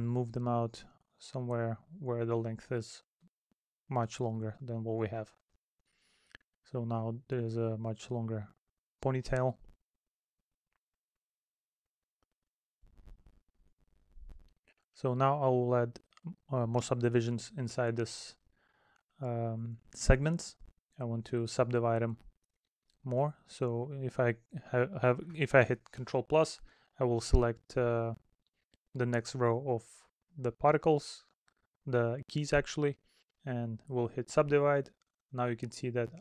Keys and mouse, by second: 4.9 middle click, 7.8 middle click, 9.2 middle click, 10.3 middle click, 14.4 middle click, 15.1 middle click, 18.8 middle click, 22.8 middle click, 23.8 middle click, 25.2 middle click, 26.9 middle click, 28.3 middle click, 30.0 middle click, 32.6 middle click.